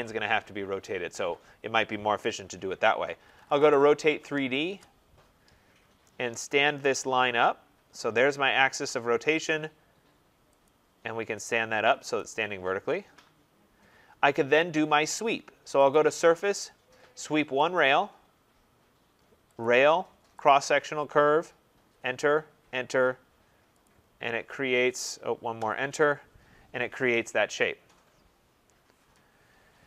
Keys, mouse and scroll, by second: 2.8-4.8 typing, 5.7 scroll, 5.9 typing, 6.9 click, 8.2 click, 8.7 scroll, 10.6 click, 11.5 click, 12.1 click, 14.1 middle click, 14.3 middle click, 15.9 click, 17.7 click, 19.5 click, 20.4 click, 21.6 Return, 22.5 Return, 23.8 click, 25.5 Return, 26.3 scroll.